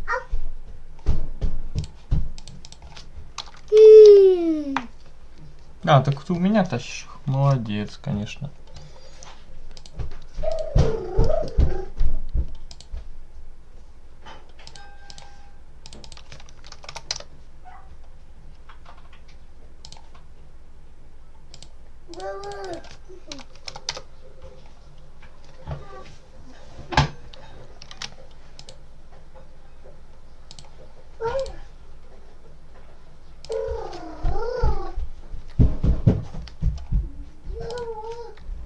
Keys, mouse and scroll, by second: 1.6 click, 2.2 click, 3.0-4.1 typing, 9.6 click, 10.4 click, 11.1 click, 12.6 click, 15.0 click, 15.7 click, 16.3-17.3 typing, 19.7 click, 20.8 scroll down 1, 21.4 click, 22.0 click, 22.9-24.1 typing, 28.0 ctrl+s, 28.4 click, 30.4 click, 31.2 click, 33.3 click, 34.4 Up, 35.3 Up, 37.6 click.